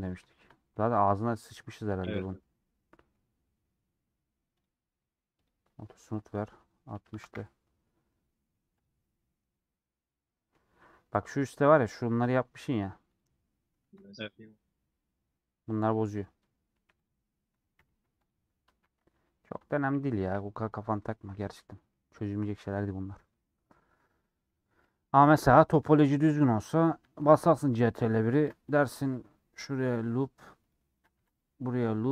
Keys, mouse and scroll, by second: 0.0 click, 0.3-1.7 shift+middle drag, 1.7 KP_Decimal, 2.4-5.3 middle drag, 5.3-8.1 drag, 8.1 middle click, 8.7 click, 9.0-10.7 middle drag, 10.7 Tab, 11.1 middle click, 11.2 scroll up 1, 11.3 scroll down 2, 12.2 scroll up 1, 12.5 1, 13.0 click, 13.8 KP_Decimal, 14.4-15.5 scroll down 6, 16.0 middle click, 16.7 1, 19.0 scroll down 1, 19.3 scroll up 1, 19.6 Tab, 19.6-20.5 scroll down 2, 20.5-20.8 scroll down 5, 21.4 scroll down 6, 21.9-23.1 middle drag, 23.1 click, 23.6-24.8 middle drag, 24.8 /, 25.3 middle click, 25.8 Tab, 26.2-26.6 scroll down 2, 26.6 middle click, 26.9 Tab, 27.8 middle click, 28.0 Tab, 31.1 ctrl+r.